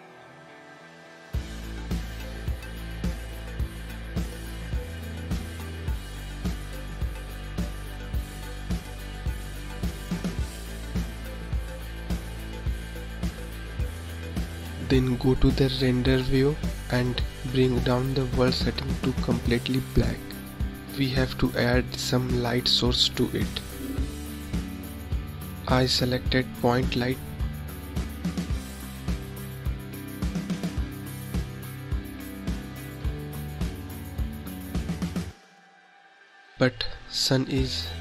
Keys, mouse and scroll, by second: 1.8 click, 4.7-8.9 drag, 9.4 click, 11.5-14.5 drag, 18.4 click, 22.1 click, 24.2 click, 26.7 shift+a, 33.3 scroll up 1, 34.5 click, 37.1 click.